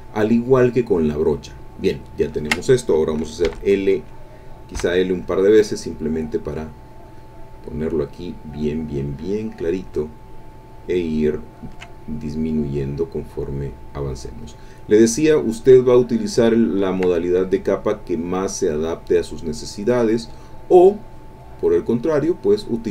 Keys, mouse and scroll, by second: 2.4 ctrl+click, 3.4 l, 4.7 l, 5.9-9.5 drag, 10.7-11.9 ctrl+drag, 11.9-15.6 ctrl+drag, 16.2-19.7 ctrl+drag, 19.8-21.6 drag, 21.7-22.9 drag.